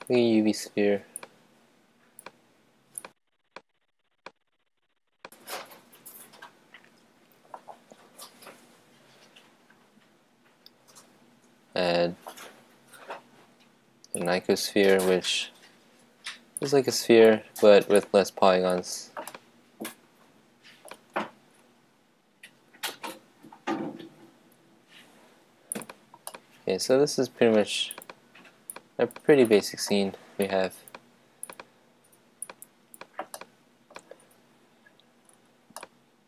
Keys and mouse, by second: 1.1-6.0 drag, 5.8 shift+a, 16.5-18.8 drag, 19.3-21.0 middle drag, 21.3 shift+a, 26.2 click, 26.5 middle click, 27.4-33.3 drag, 33.3-35.2 middle drag, 35.7-36.2 middle drag.